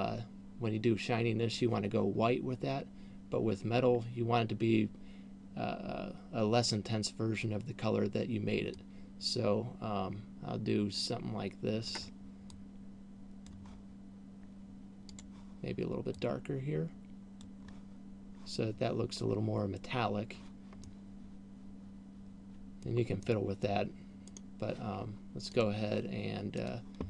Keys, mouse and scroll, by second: 15.3 click, 21.3 middle click, 23.6 middle click, 24.6 right click, 26.1 click.